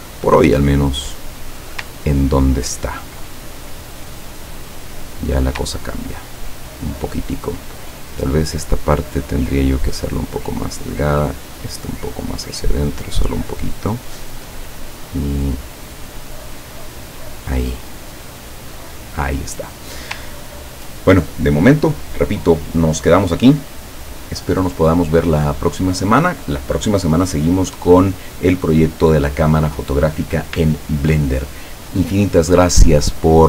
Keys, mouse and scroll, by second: 1.2 click, 2.2-2.7 ctrl+scroll down 2, 2.9 ctrl+scroll down 2, 3.6-4.9 ctrl+drag, 5.9-6.4 ctrl+scroll down 4, 7.2 ctrl+scroll up 2, 8.3 click, 9.3-11.0 drag, 11.3-14.2 drag, 15.1 click, 16.4-17.7 drag, 18.4 click, 18.9 click, 19.7 click, 20.6 ctrl+scroll down 2.